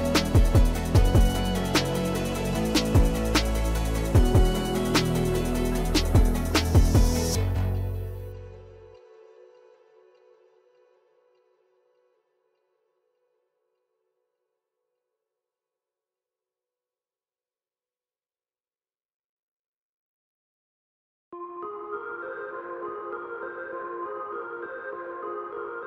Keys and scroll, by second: 1.1 i, 4.7 x, 12.3 \, 16.0 p, 17.8 Tab, 19.0 Escape, 23.8 e.